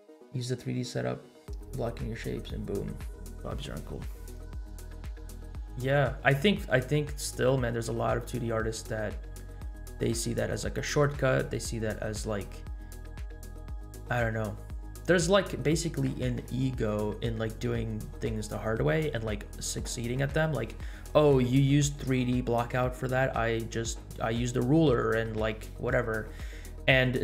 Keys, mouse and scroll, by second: 10.0 scroll down 1, 10.6 scroll down 1, 11.8 scroll up 1, 12.4-12.8 scroll up 2.